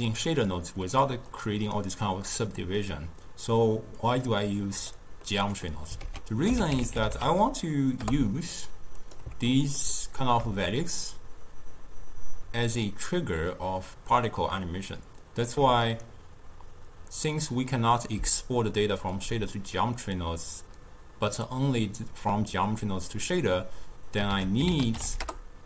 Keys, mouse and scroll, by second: 0.5-1.4 middle drag, 1.4 click, 2.3-4.0 middle drag, 4.0-5.3 drag, 5.3 middle click, 6.1 ctrl+a, 9.6-10.7 ctrl+middle drag, 10.7-13.8 shift+drag, 24.4 ctrl+a.